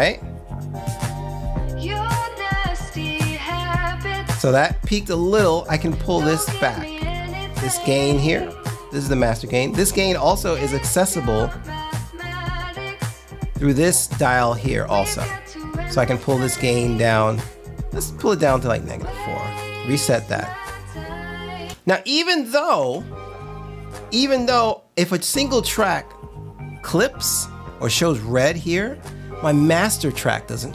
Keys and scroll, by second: 21.7 space, 22.9 space, 25.3 space.